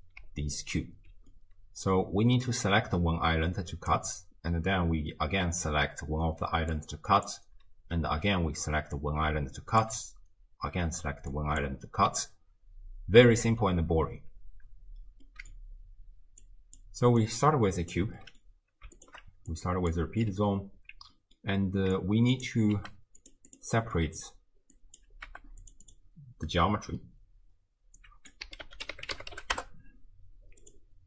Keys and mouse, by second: 0.2-1.1 d, 1.3-1.9 middle drag, 1.9 d, 2.4-3.9 drag, 2.4 d, 3.9 d, 4.0 d, 4.1 d, 6.3-12.0 typing, 6.8 click, 9.0 click, 11.3 click, 15.3 middle drag, 16.4-16.8 drag, 17.2-18.0 drag, 18.2 middle drag, 19.0 alt+shift+click, 19.6-20.0 drag, 21.2 middle click, 22.0-22.5 drag, 22.7 g, 23.5 click, 23.8 middle drag, 24.8 drag, 25.3 g, 25.9 click, 28.0-30.7 drag.